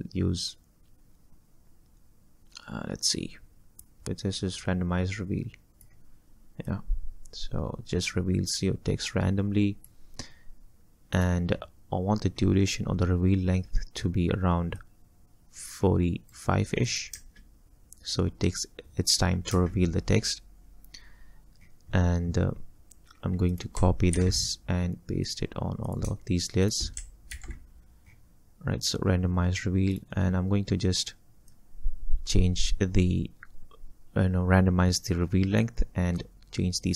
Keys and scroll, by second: 4.0 ctrl+z, 17.2 space, 24.2 ctrl+c, 27.4 ctrl+shift+v.